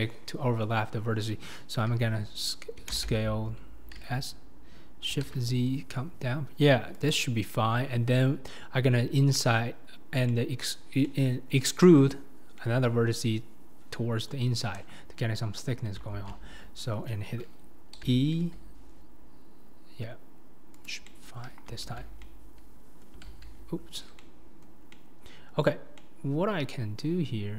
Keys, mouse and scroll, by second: 4.0 s, 10.3 middle click, 11.1 middle click, 12.6 middle click, 12.9-16.1 drag, 12.9-13.9 right drag, 13.9 middle click, 14.3-16.0 right drag, 16.1 alt+z, 18.0 e, 21.1 middle click, 21.8 alt+z, 22.2-23.3 middle drag, 23.3 ctrl+z, 24.2 middle click, 24.9-25.4 scroll up 1, 25.4-27.5 middle drag.